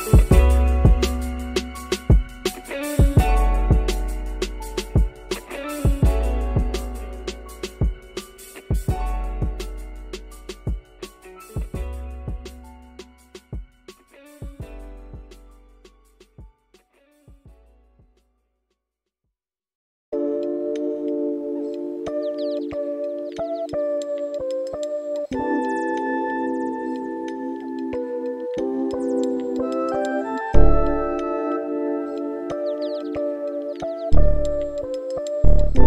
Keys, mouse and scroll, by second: 5.6 click, 8.2-9.6 drag, 11.9-12.9 shift+middle drag, 13.1 middle click, 14.3 space, 16.7 middle click, 19.5 middle click, 25.4 middle click, 26.4 shift+middle click, 29.4 click.